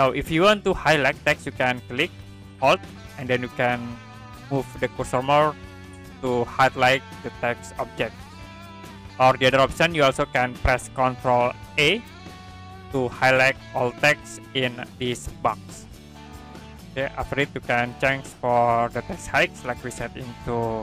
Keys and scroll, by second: 12.2 ctrl+a.